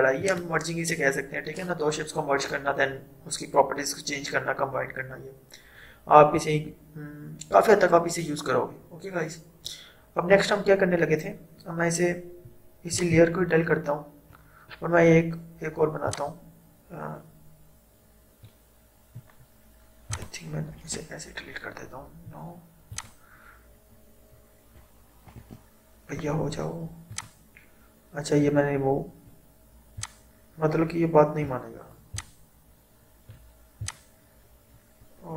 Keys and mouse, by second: 0.3 click, 13.0-20.1 drag, 20.8 Delete, 22.9 click, 25.5 Delete, 27.1 click, 30.1-32.4 drag, 32.4-35.3 drag.